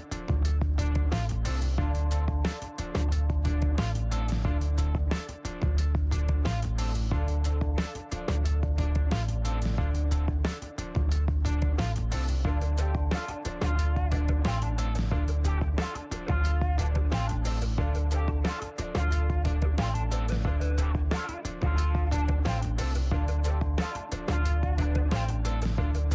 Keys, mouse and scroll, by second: 0.1 shift+right click, 2.8 shift+right click, 3.9 click, 5.9 click, 7.1 middle click, 8.5 click, 10.6 click, 11.3 click, 11.6 right click, 12.5 click, 13.6 click, 15.9 KP_1, 16.1 KP_7, 16.5 KP_Enter, 19.0 click, 20.2 click, 23.5 click.